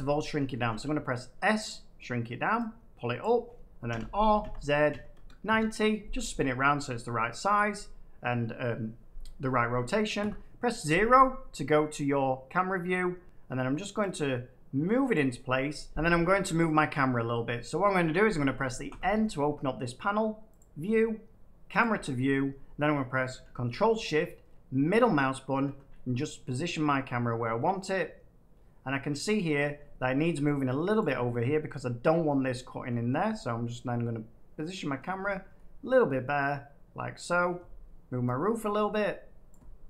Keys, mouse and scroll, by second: 0.6 s, 1.6 click, 3.1 click, 3.8-5.1 typing, 5.4 Return, 10.1 0, 15.0-16.0 drag, 18.8 n, 20.5 click, 21.7 click, 23.4 click, 25.5 middle click, 29.5 shift+middle click, 30.9 click, 32.6 click, 34.9 shift+middle click, 37.3 shift+middle click, 39.4 click.